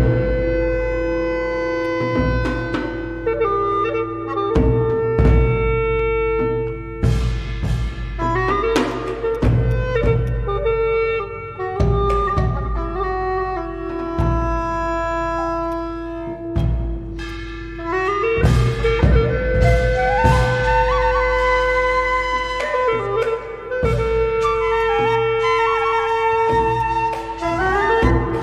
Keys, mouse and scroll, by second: 9.3 alt+click, 10.2 alt+click, 13.5-14.2 scroll up 3, 13.7 alt+middle click, 14.2 alt+click, 15.2-15.6 scroll up 1, 24.0 scroll down 1, 24.3 scroll up 1, 24.5-24.8 scroll down 1, 28.2 scroll up 1.